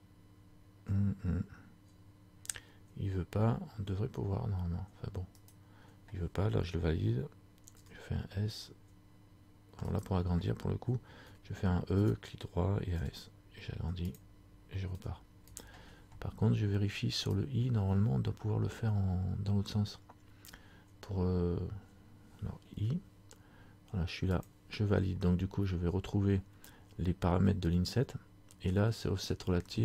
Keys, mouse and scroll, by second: 8.0 s, 17.5 click.